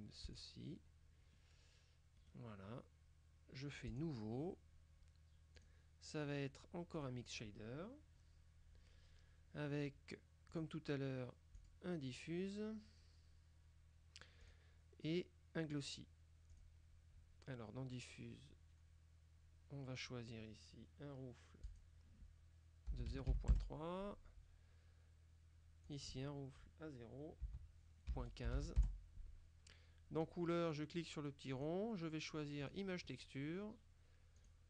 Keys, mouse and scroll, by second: 0.3 click, 2.3 right click, 4.0 click, 5.7 click, 7.1 click, 10.6 click, 11.7 click, 14.5 click, 16.6 click, 21.7 click, 23.0 KP_0, 23.1 KP_Decimal, 23.4 KP_3, 23.6 KP_Enter, 25.9 click, 27.5 KP_0, 28.2 KP_Decimal, 28.5 KP_1, 28.7 KP_5, 28.9 KP_Enter, 31.6 click, 32.7 click, 34.5 click.